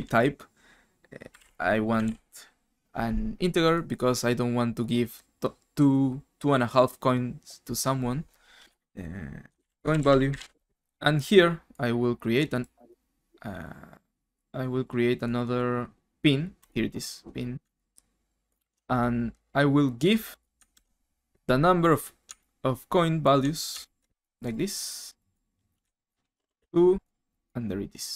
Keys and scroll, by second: 1.0-2.5 typing, 8.7 F2, 9.3-10.8 typing, 20.7 ctrl+x, 25.8 ctrl+v, 26.3 BackSpace, 26.4 BackSpace, 26.5 BackSpace.